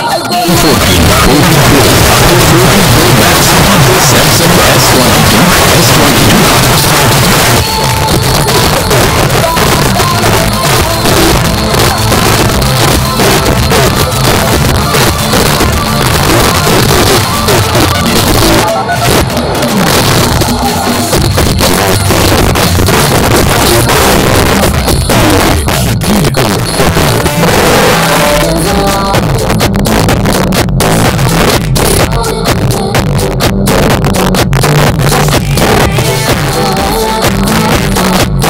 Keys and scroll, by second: 6.6 Page_Down.